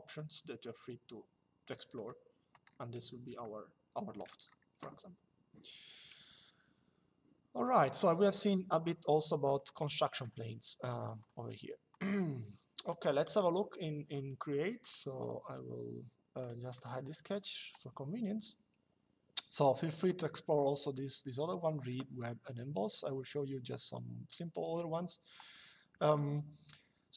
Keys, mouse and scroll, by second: 1.7 click, 3.1 shift+middle click, 9.2 click, 14.5 click, 16.1 click.